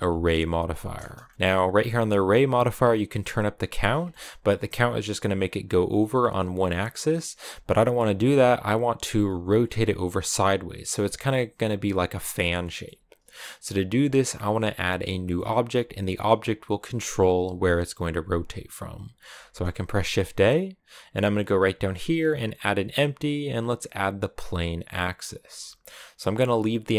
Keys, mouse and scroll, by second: 0.9 scroll down 1, 1.1-3.1 shift+middle drag, 3.1 click, 3.8 scroll down 1, 3.9-16.4 shift+middle drag, 16.4-24.7 scroll up 1.